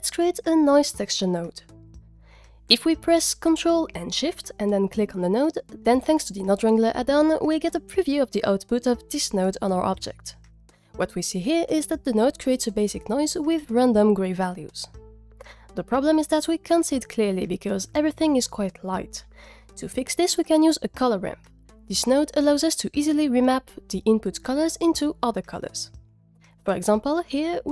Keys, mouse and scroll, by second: 0.7 click, 1.1 shift+a, 5.4 ctrl+shift+click, 19.8 click, 20.0 shift+a.